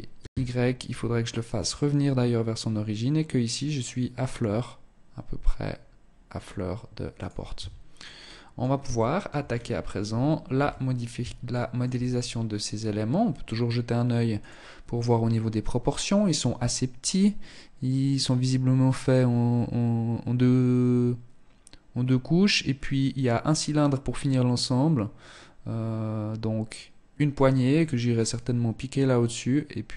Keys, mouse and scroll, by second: 6.7 shift+Tab, 7.2 middle click, 8.1 shift+middle click, 8.5-9.7 scroll down 6, 9.7 KP_1, 10.7 shift+middle click, 11.3-12.0 scroll up 2, 13.6 scroll.